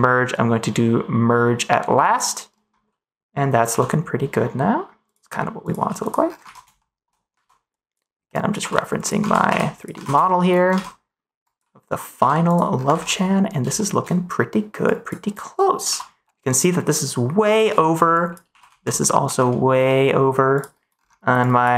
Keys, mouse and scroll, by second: 3.6 g, 5.0 click, 5.7 g, 6.4 ctrl+s, 6.7 middle click, 7.7 click, 8.4 click, 8.5 g, 8.9 click, 9.2 ctrl+s, 9.4 g, 9.7 click, 9.9 ctrl+s, 10.2 middle click, 11.5 click, 12.1 g, 12.9 ctrl+s, 13.7 middle click, 14.8 click, 15.8 g, 17.4 click, 17.7 middle click, 18.1 click, 18.4 g, 18.6 x, 19.2 y, 20.5 click.